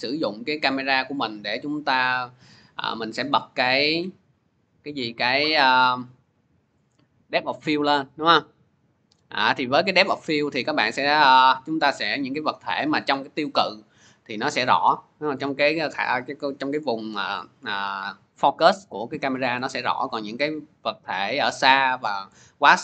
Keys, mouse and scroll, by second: 0.1 click, 1.1 click, 1.7 click, 3.5 click, 4.4 click, 7.9 click, 9.5 click, 10.6 scroll, 11.2 scroll.